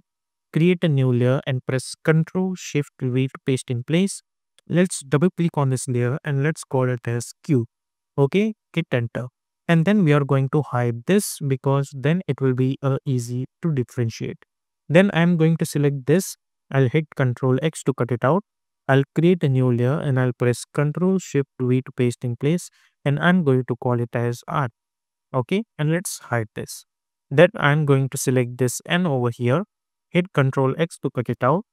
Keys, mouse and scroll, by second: 1.4 click, 3.1 ctrl+shift+v, 5.0 click, 6.6-8.0 typing, 8.6 Return, 11.1 click, 15.1-16.3 drag, 17.3 ctrl+x, 19.3 click, 21.7 ctrl+shift+v, 23.4 click, 24.5 shift+i, 24.9 Return, 26.5-30.2 drag, 30.2 ctrl+x.